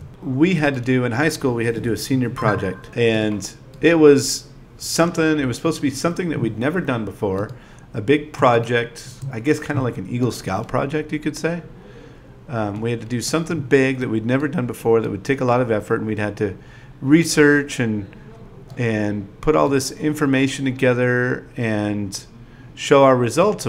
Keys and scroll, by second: 0.4 0, 0.9 shift+i, 8.5 space, 9.0 space, 11.1 i, 14.6-16.9 typing, 19.0 9, 19.4 shift+e, 22.2 BackSpace, 22.6 BackSpace, 22.9 BackSpace.